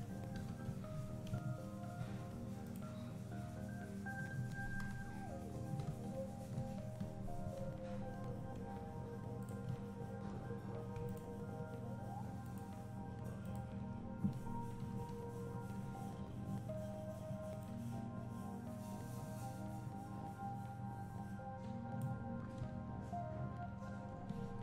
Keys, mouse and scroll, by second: 0.0-2.8 drag, 0.4 alt+a, 0.7 z, 4.9 KP_2, 5.9 KP_1, 6.6 KP_3, 7.6 Tab, 8.2 z, 9.6 click, 9.8 `, 11.1 alt+click, 12.4 alt+shift+click, 13.4 alt+shift+click, 14.9 z, 15.5 scroll up 1, 15.8 `, 16.2 scroll down 1, 17.6-24.6 drag.